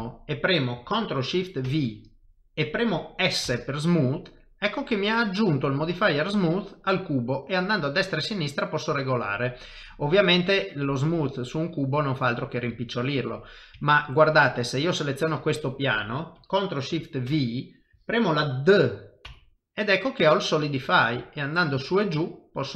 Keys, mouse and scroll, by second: 0.1 shift+middle click, 1.6 ctrl+shift+v, 13.4 middle click, 13.8 shift+middle click, 14.7 click, 15.1 middle click, 17.3 ctrl+shift+v.